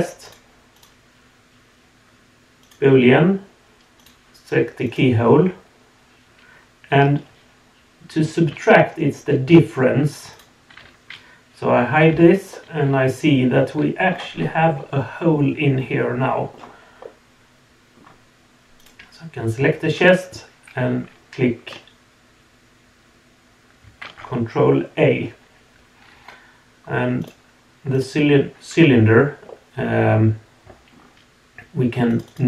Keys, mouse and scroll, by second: 0.2 click, 0.7-2.7 drag, 4.0 click, 10.3 click, 12.1 h, 12.5-14.1 middle drag, 14.3-14.7 scroll up 2, 14.8-16.5 middle drag, 16.5-17.1 scroll down 2, 17.0-18.0 middle drag, 18.8 click, 27.2 click, 27.9 click, 29.5-30.9 middle drag, 32.1 click, 32.3-32.4 drag.